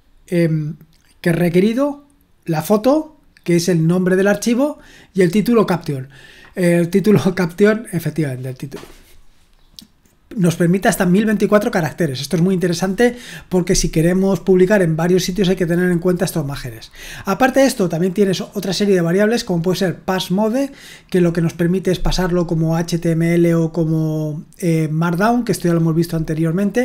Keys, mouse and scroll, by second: 5.3 click, 5.6 click, 10.8 click, 11.1 click, 19.2 click, 19.5 click.